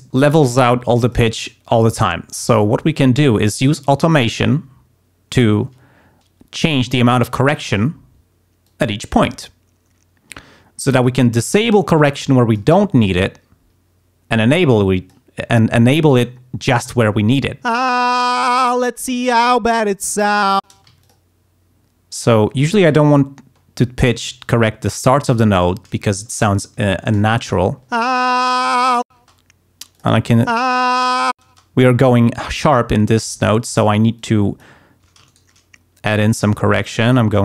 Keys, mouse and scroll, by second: 1.0 click, 7.5 click, 8.6 click, 11.0 click, 11.8 click, 14.5 click, 17.7 space, 20.7 space, 20.8 d, 21.0 click, 22.3 click, 23.1 ctrl+scroll up 2, 24.4 click, 27.0 Home, 27.7 ctrl+scroll up 2, 28.0 ctrl+space, 28.7 ctrl+scroll down 2, 29.1 space, 29.9 click, 30.5 space, 31.4 space, 34.1 click, 35.2 shift+right click, 36.2-37.3 drag.